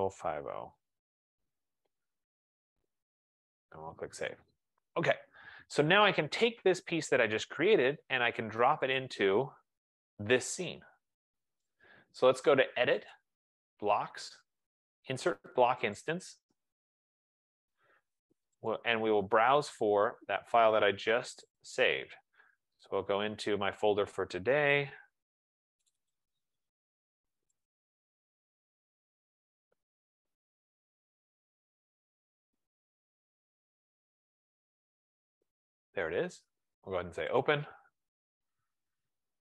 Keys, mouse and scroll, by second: 0.0-0.9 typing, 3.8 click, 6.2 click, 9.3 click, 11.8 right click, 13.3 click, 16.2 click, 19.0 click, 19.6 F15, 21.8 click, 26.0 click, 26.3 click, 27.9 click, 28.5 click, 30.9 click, 34.6 click, 34.9 click, 36.1 click, 37.7 click.